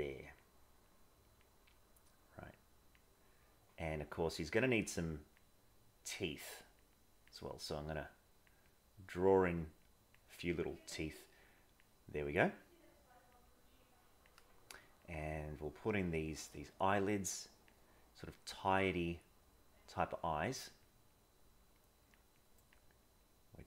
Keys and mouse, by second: 0.9 click, 1.7 click, 3.3 click, 5.2 click, 5.6 click, 6.6 click, 7.0 click, 8.1 click, 8.6 click, 9.9 click, 11.6 click, 12.5 click, 13.4 click, 14.8 click, 15.3 click, 16.5 click, 17.1 click, 18.2 click, 18.5 click, 19.2 click, 20.7 click, 21.0 click, 22.3 click, 23.1 click.